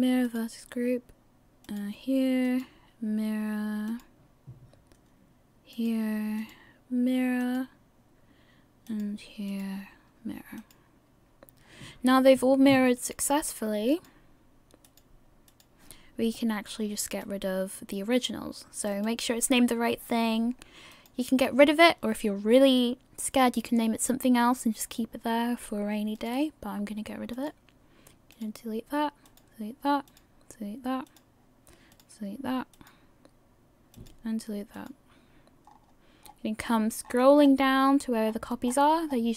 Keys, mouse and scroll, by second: 1.7 click, 2.5 click, 5.0-5.7 scroll down 3, 5.7 click, 6.4 click, 9.5 click, 11.6-12.5 scroll down 1, 13.0 click, 13.9 click, 15.5 click, 17.4 right click, 19.2 right click, 20.9 right click, 20.9 click, 26.2 click, 27.3 click, 29.3 click, 30.1 click, 31.9 click, 34.7 click, 35.7-36.3 scroll down 6, 37.8 scroll down 24, 38.7 scroll down 20.